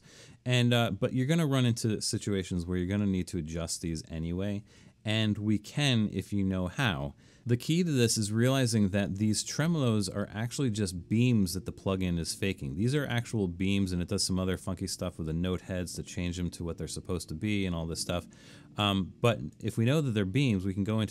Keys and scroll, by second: 3.8 super+=.